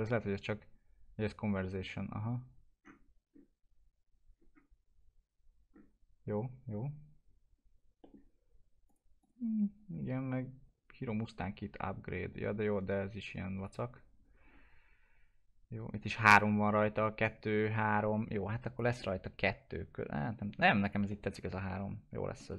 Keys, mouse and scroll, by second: 1.6 middle click, 3.3-4.3 scroll down 1, 7.5-7.8 scroll down 1, 8.0 middle click, 8.8 click, 13.6 click, 14.4-15.3 scroll down 1, 18.7 click, 19.3-20.8 alt+middle drag, 20.8 click, 21.3 scroll down 1, 21.6 alt+middle click.